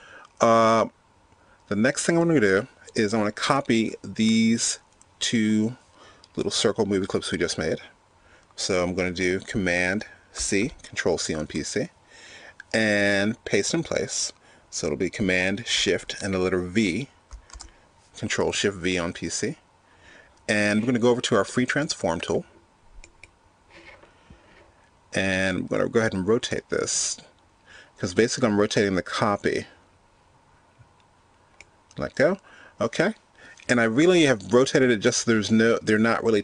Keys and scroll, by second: 9.9 super+c, 15.9 shift+super+v.